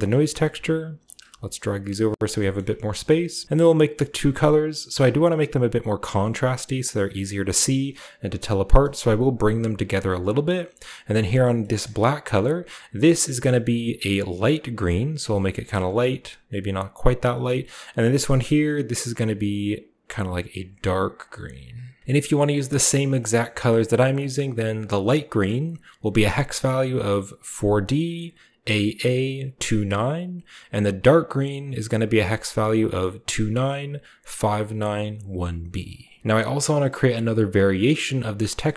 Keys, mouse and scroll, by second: 0.0 click, 0.5-1.2 typing, 1.0 click, 1.4 scroll up 1, 1.7 middle click, 2.6-3.0 scroll up 2, 2.9 click, 2.9 middle click, 2.9 typing, 3.5-4.7 drag, 5.7-6.4 drag, 6.8 click, 8.2 click, 11.0 click, 11.4-11.8 scroll down 1, 11.8 scroll up 1, 12.4-12.9 scroll up 1, 13.4 click, 14.0-14.6 drag, 14.9 click, 15.8-16.8 scroll down 1, 16.8-17.8 scroll up 1, 17.8 click, 18.4 click, 19.2 click, 20.2-22.0 scroll down 1, 21.2 click, 22.0 ctrl+v, 22.5-24.0 drag, 23.0-24.6 scroll down 1, 23.0-25.2 middle drag, 24.8 click, 31.0 click, 31.6 click, 35.9 click, 36.3 click, 38.1 click.